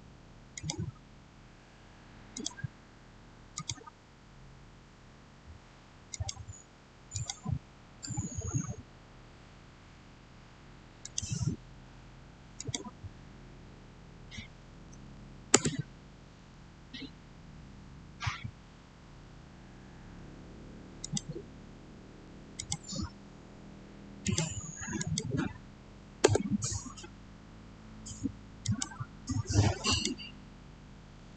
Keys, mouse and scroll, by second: 0.4 click, 6.0 click, 7.9-8.2 scroll down 1, 10.9 click, 14.5 typing, 15.4 Return, 20.9 click, 26.2 Return, 28.5 click, 30.8-31.3 typing.